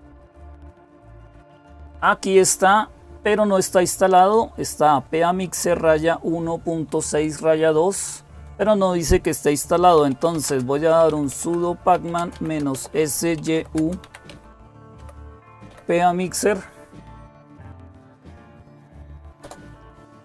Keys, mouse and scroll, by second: 9.5-16.0 typing, 19.2 Return.